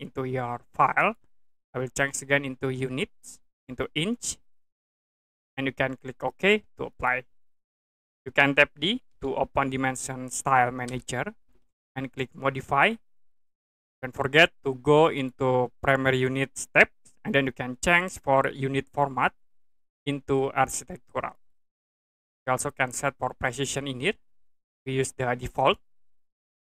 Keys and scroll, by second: 9.1 d, 10.8 Return.